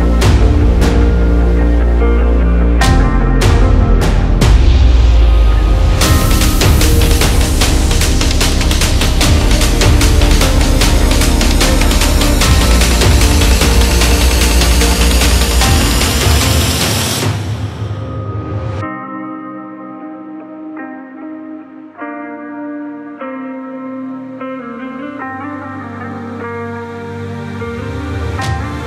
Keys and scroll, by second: 3.3 ctrl+j, 9.9 KP_4, 10.1 KP_5, 16.9 [, 16.9-17.5 [, 22.7 x.